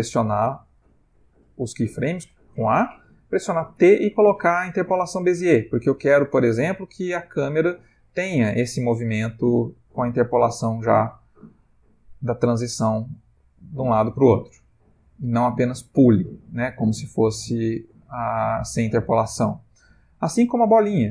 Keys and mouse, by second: 0.8 a, 2.0 a, 2.1 a, 2.6 a, 3.8 t, 5.8 space, 19.0 Escape.